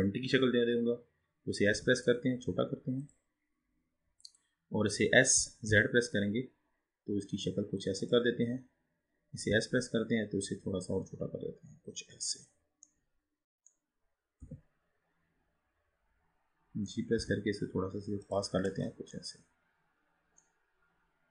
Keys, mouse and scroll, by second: 0.0-0.6 scroll down 4, 0.6-1.9 scroll up 2, 1.9 s, 3.6-5.2 scroll up 5, 5.5 s, 8.4-9.5 scroll up 4, 9.6 s, 12.7 click, 13.1-14.4 middle drag, 14.4 KP_7, 15.1-15.4 scroll down 3, 15.6-17.3 scroll down 5, 17.3 g, 18.7-19.0 drag, 19.2-21.1 middle drag, 21.1 scroll down 3.